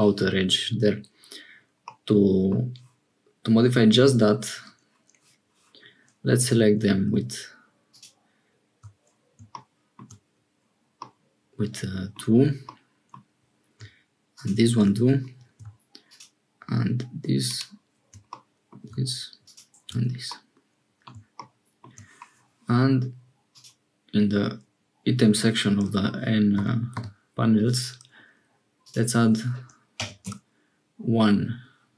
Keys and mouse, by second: 1.8 middle click, 6.3 2, 11.0-12.2 middle drag, 12.6 middle click, 18.3 middle click, 20.2 click, 23.4 click, 26.5 n, 26.9 n, 28.8-30.9 drag.